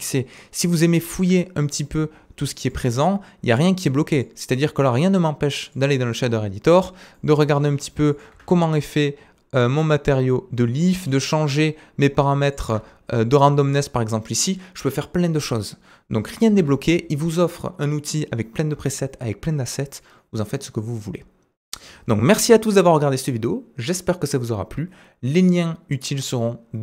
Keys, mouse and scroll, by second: 1.6-2.6 drag, 2.7-4.3 drag, 4.6 click, 6.7-7.1 scroll down 2, 7.1 middle click, 7.5-8.3 scroll up 3, 8.3-26.8 drag, 8.4 Tab, 8.9-10.3 scroll down 3, 10.3-12.6 middle drag, 10.3-12.6 right drag, 10.8-11.3 scroll up 4, 12.8 Tab, 12.8 typing, 16.5 ctrl+Tab, 16.5 typing, 16.7 ctrl+Tab.